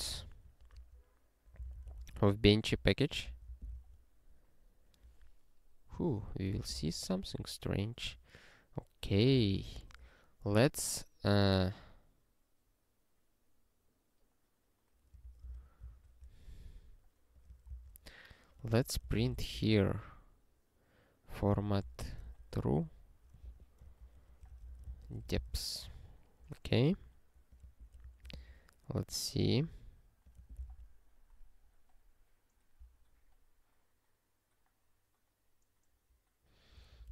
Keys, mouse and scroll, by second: 0.0-3.3 typing, 3.3 Return, 3.5 ctrl+e, 6.5 Return, 6.8 ctrl+s, 7.5 scroll up 1, 9.0 click, 9.3 Return, 9.7 (, 15.2 ctrl+a, 15.4 ctrl+space, 15.5 ctrl+n, 15.8 ctrl+w, 17.4 click, 17.7 Return, 18.4-20.0 typing, 21.3-22.7 typing, 23.8-25.6 typing, 24.5 ctrl+f, 26.5 scroll down 1, 27.5 click, 28.0 ctrl+n, 28.5 ctrl+e, 29.0 scroll down 1, 30.2 click, 30.7 ctrl+e, 33.1 scroll up 1, 34.3-34.7 scroll up 1, 36.9 ctrl+n, 37.0 ctrl+n.